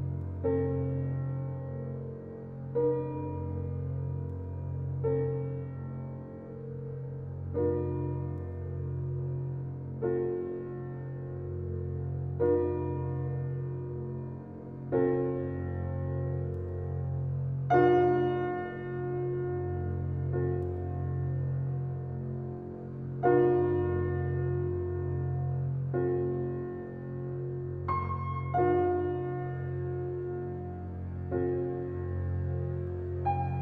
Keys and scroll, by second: 14.3 ctrl+z, 15.7 f.